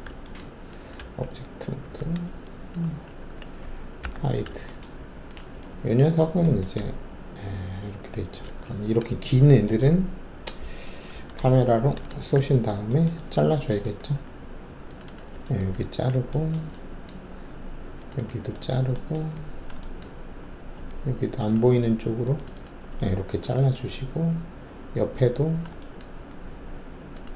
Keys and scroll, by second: 0.9 alt+`, 1.9 w, 2.8 alt+`, 4.0 h, 11.7 ctrl+alt+shift+c.